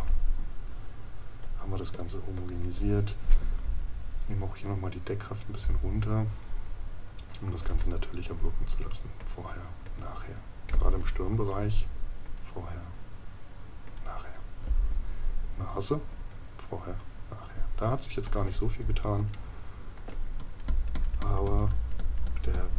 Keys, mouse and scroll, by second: 19.3 right click.